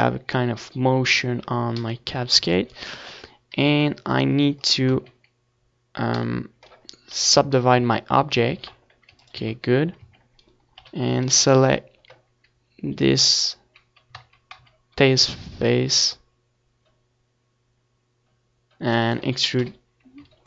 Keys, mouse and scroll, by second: 0.1 KP_1, 0.8 KP_7, 2.2-5.8 drag, 2.8 z, 3.3 c, 7.4-8.8 right drag, 7.9 KP_1, 8.8-10.1 middle drag, 10.1 e, 12.7 click, 12.7 z, 13.0 middle click, 13.4 Tab, 13.9 Tab, 16.4 KP_7, 17.0 z, 17.7 a, 17.8 c, 19.0-20.4 right drag, 19.1 x.